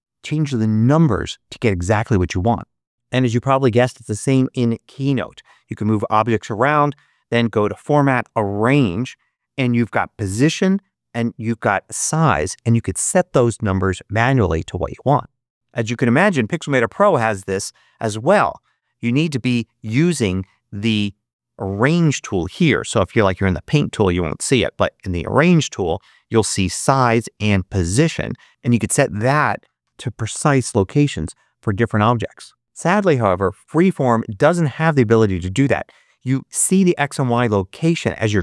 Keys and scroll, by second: 29.8-30.7 typing, 30.8 Return, 31.8 Return.